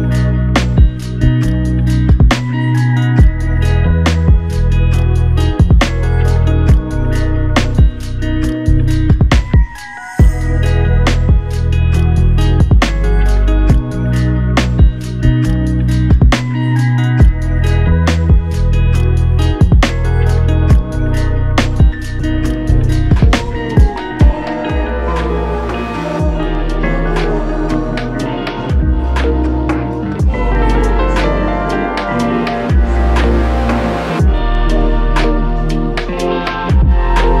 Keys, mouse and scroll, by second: 2.1 ctrl+click, 3.8 ctrl+click, 11.0 shift+click, 15.0 shift+click, 20.5 alt+click, 28.0 f, 35.5 double click.